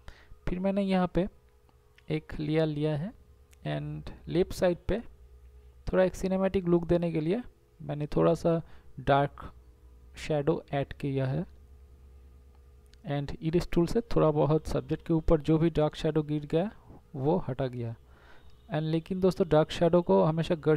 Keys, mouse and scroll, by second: 0.3 ctrl+z, 1.8 ctrl+z, 2.9 ctrl+z, 3.5 [, 9.2 e, 10.8 ].